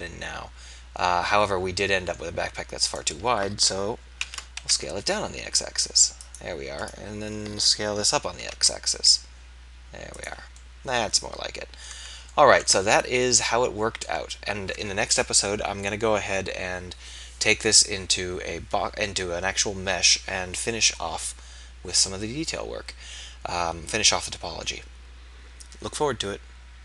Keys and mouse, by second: 4.1 ctrl+a, 6.3-7.4 drag, 8.7 ctrl+a, 11.9 Tab, 13.1 z, 20.7-23.2 middle drag.